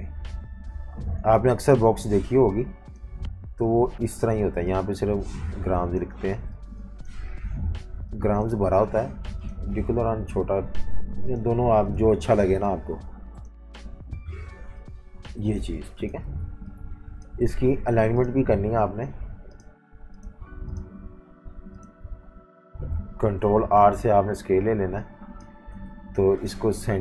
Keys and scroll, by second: 15.7-18.1 typing, 23.2 super+r, 25.7 super+2.